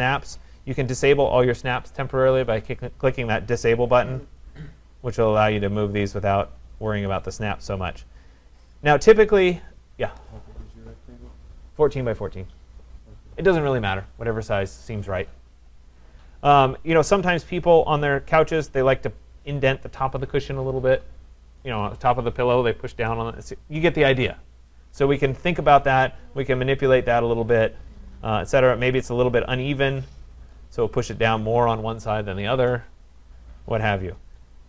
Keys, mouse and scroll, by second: 0.2 click, 0.9 click, 6.9 click, 7.3 scroll, 7.5 middle click, 8.7 click, 13.1 click, 17.6-26.6 drag, 30.5 click, 33.2-34.1 scroll, 34.5 click.